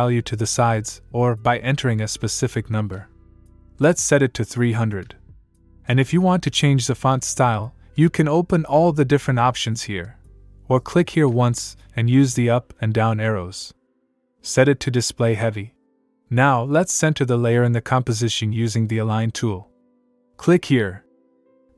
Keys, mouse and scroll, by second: 3.2 click, 7.1 click, 10.2 click, 11.2 click, 12.0 Up, 13.5 Down, 14.0 Up, 19.4 click, 20.6 click.